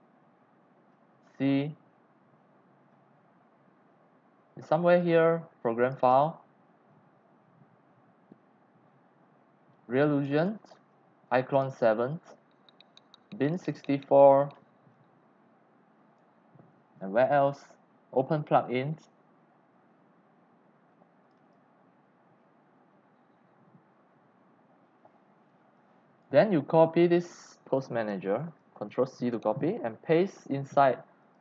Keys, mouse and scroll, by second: 1.3 click, 4.1 click, 5.8 click, 6.0 click, 6.9-8.5 scroll down 8, 8.9 click, 9.1-9.5 scroll, 10.2 click, 10.3 click, 11.5 click, 11.7 click, 12.4 click, 13.4 click, 14.9-16.0 drag, 16.3 click, 18.3 click, 21.2 click, 25.8 click, 26.8 click, 27.4 click, 28.0 click, 28.4 click, 29.3 ctrl+c, 31.2 click.